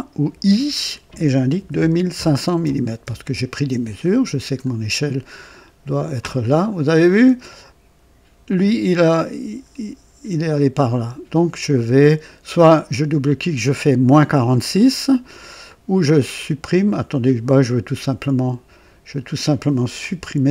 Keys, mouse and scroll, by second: 0.2 i, 1.5-2.5 typing, 2.9 Return, 3.2 Return, 4.0-4.7 scroll down 2, 4.8-5.9 typing, 4.8 right click, 5.2 right click, 5.4 right click, 6.5-6.8 scroll up 1, 7.0 right click, 7.9 typing, 11.0 click, 17.4 click, 19.2 click, 20.0 Delete.